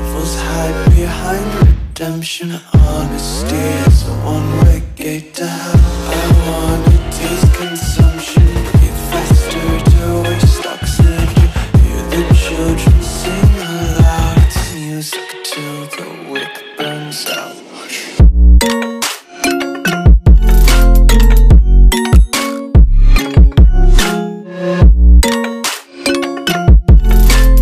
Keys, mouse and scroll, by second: 6.7 click, 13.8 alt+click, 16.0 Return, 26.9 Delete, 27.5 click.